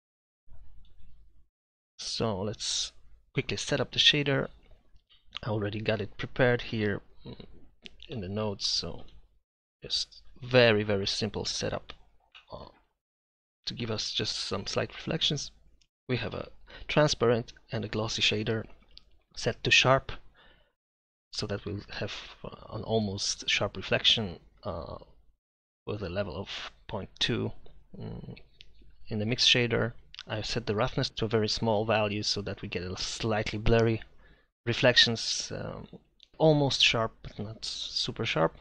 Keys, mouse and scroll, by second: 9.6 Delete, 12.7-13.1 drag.